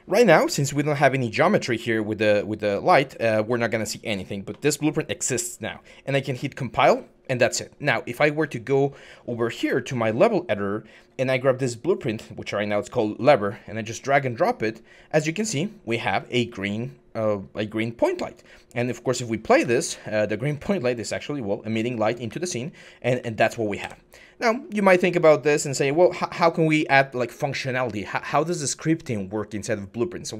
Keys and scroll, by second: 9.9-11.1 typing, 18.9-23.0 typing, 23.6 Escape.